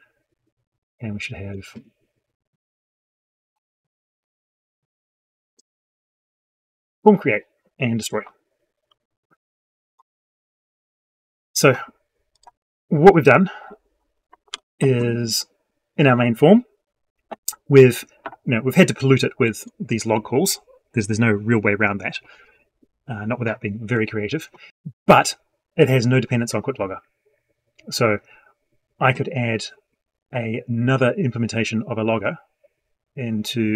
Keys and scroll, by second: 14.3 ctrl+s.